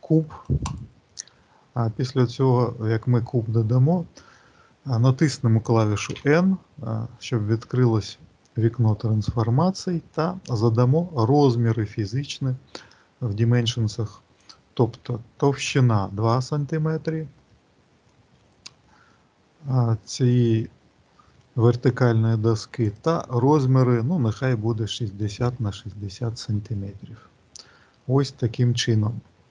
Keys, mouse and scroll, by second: 14.3 click, 16.6-17.3 scroll up 2, 17.4 shift+middle click, 18.1-19.0 scroll up 4, 19.0 middle click, 20.1 shift+middle click, 22.8 click, 26.8-27.9 scroll up 5, 27.9-29.3 scroll up 9.